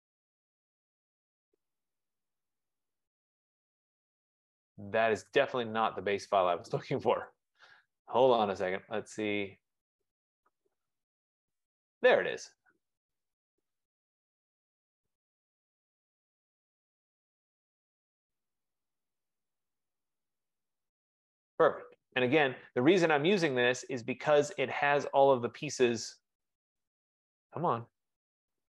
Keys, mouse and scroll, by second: 0.3 click, 7.5 click, 8.8 click, 10.4 click, 10.6 click, 12.3 click, 12.4 click, 15.8 click, 18.4 F15, 19.4-20.8 drag, 21.4-24.4 drag, 25.4 click, 27.3 click.